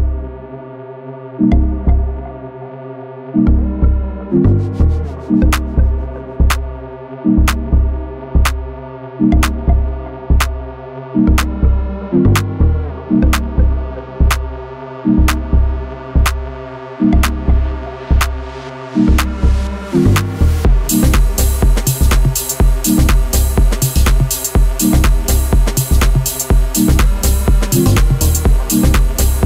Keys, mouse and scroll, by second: 0.0 s, 0.7 g, 1.2 Tab, 1.3-2.0 scroll down 8, 1.7 z, 2.0 middle click, 2.4 click, 2.6 scroll down 3, 2.9 shift+middle click, 3.8-4.3 scroll up 12, 4.4 Tab, 4.6 scroll down 2, 4.7 shift+middle click, 5.6 z, 5.9-7.0 middle drag, 7.0 Delete, 7.6 z, 7.8 scroll down 6, 8.1 Tab, 8.4-8.8 middle drag, 8.8 scroll down 1, 9.1-9.6 scroll up 1, 9.6 shift+middle drag, 9.8 scroll down 3, 10.0-10.3 scroll up 1, 10.3-11.5 middle drag, 11.5-11.8 scroll up 4, 11.8-17.1 middle drag, 17.1 click, 17.3 Tab, 18.0 click, 18.9 l, 19.3 s, 21.2 alt+middle click, 21.3 alt+scroll down 1, 21.5 alt+middle click, 21.9 g, 23.0 middle click, 23.6 Tab, 23.7 click, 24.7 middle click, 25.2 g, 27.0 click, 27.2 scroll down 2, 27.4-28.5 middle drag, 28.5 scroll up 1, 28.8 click, 29.1 shift+click.